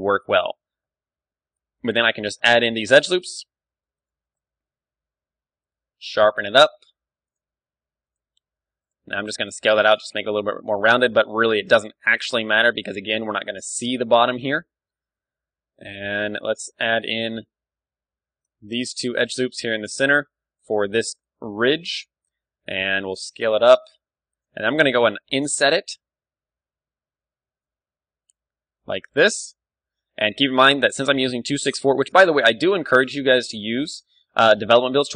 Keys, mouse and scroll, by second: 2.1 click, 2.3 middle click, 2.9-3.9 drag, 3.3 a, 3.7 ctrl+r, 3.9 middle click, 4.4 click, 4.5 s, 5.2 right click, 5.7-7.6 drag, 6.0 ctrl+r, 6.5-7.6 right drag, 6.5 s, 7.8 s, 9.1 s, 10.8-12.7 drag, 11.0 a, 11.3 ctrl+r, 12.8 Tab, 12.8-14.8 drag, 13.6 middle click, 14.4 Tab, 14.8-18.9 middle drag, 15.1 a, 15.5 KP_1, 17.9 z, 18.3 z, 18.6 ctrl+r, 19.9-23.2 drag, 20.2 s, 21.0 d, 22.9 s, 24.4-26.3 drag, 25.1 i, 32.1-34.0 drag, 33.8 d, 34.0-35.1 right drag.